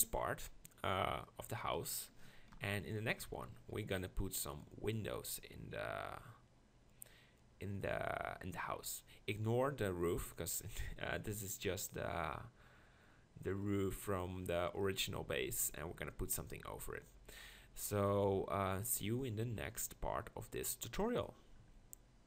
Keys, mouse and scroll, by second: 1.8 right click, 2.5 ctrl+KP_Decimal, 2.7-3.6 drag.